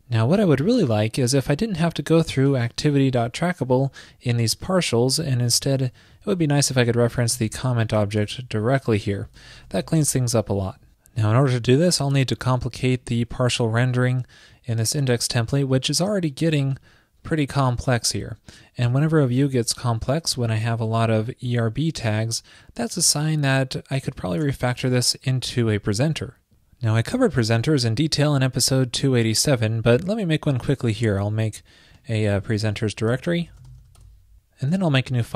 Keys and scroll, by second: 12.1 super+s, 34.9 ctrl+super+n.